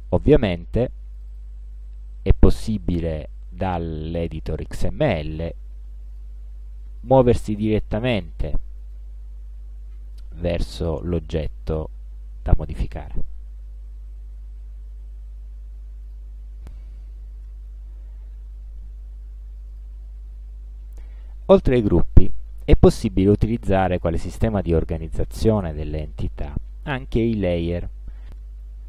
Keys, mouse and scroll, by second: 0.1 click, 1.3 click, 3.3 click, 4.4 click, 5.4 click, 6.2 click, 7.1 click, 8.2 click, 8.9 click, 16.2 click, 19.8 click, 22.2 click, 26.5 click.